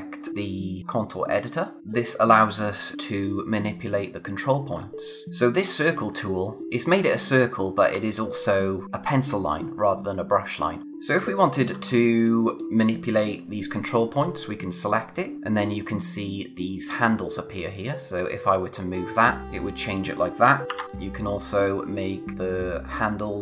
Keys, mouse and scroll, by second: 1.5 click, 4.7-6.6 scroll up 1, 7.4-7.7 scroll up 1, 10.8 click, 11.1 space, 11.3 click, 11.6 space, 11.8 scroll up 1, 12.1 click, 14.1 click, 14.9-15.4 scroll down 1, 20.4 ctrl+Num_Lock, 20.6 z, 21.6 click.